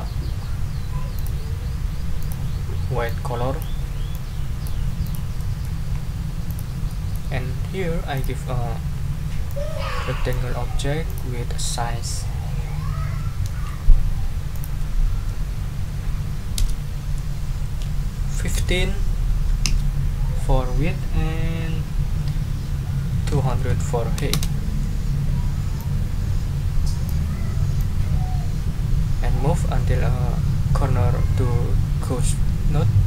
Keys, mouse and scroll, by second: 1.1 click, 2.2 click, 3.0 click, 4.1 click, 5.0 click, 5.4 middle click, 5.9 ctrl+scroll up 2, 6.5 ctrl+click, 6.9 ctrl+middle click, 8.1 click, 9.5-10.5 drag, 11.1 click, 14.5 ctrl+click, 14.9 ctrl+Caps_Lock, 16.6 Caps_Lock, 17.6 ctrl+a, 18.5 5, 19.6 Tab, 23.1-24.0 typing, 25.8-27.2 drag, 27.8-33.0 drag.